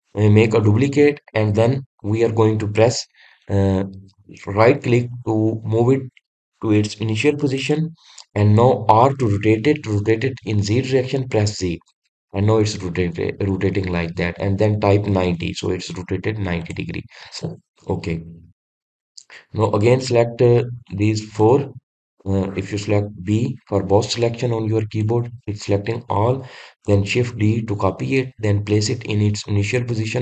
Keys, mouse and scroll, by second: 17.5 click, 18.2-19.7 middle drag, 19.7 click, 21.7 click, 22.3 click, 23.0 click, 24.6 b, 28.1 shift+d.